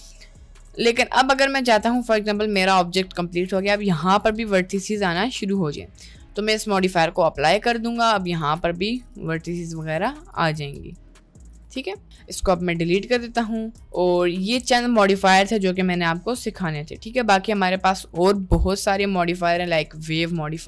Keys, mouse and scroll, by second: 0.7 Tab, 1.1 middle click, 2.6 Tab, 3.3 middle click, 3.5 Tab, 5.0 click, 5.4 click, 5.6 Tab, 6.8 click, 7.8 Tab, 8.2 click, 8.5 g, 10.0 g, 10.3 click, 10.7 g, 11.2 middle click, 11.6 Tab, 11.8-12.2 middle drag, 13.8 Delete, 18.6 shift+a.